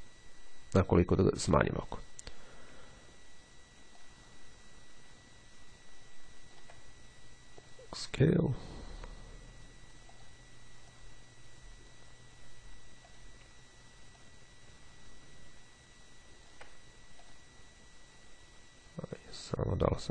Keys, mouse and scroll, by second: 2.0 click, 3.9-7.2 ctrl+drag, 7.7 click, 10.2 click, 11.0-12.5 drag, 13.2 click, 14.2-17.1 ctrl+drag, 17.4 click, 19.6 click.